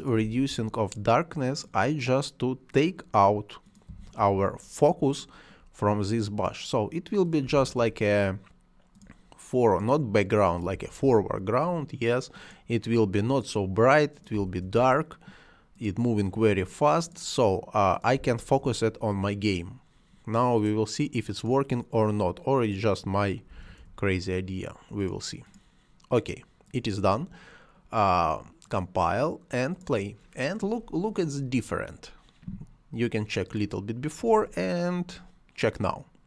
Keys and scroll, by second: 0.0-0.7 typing, 3.6-4.4 typing, 7.2-8.0 typing, 10.5-11.3 typing, 14.1-14.9 typing, 17.9-18.7 typing, 23.2-24.1 typing, 34.2 space.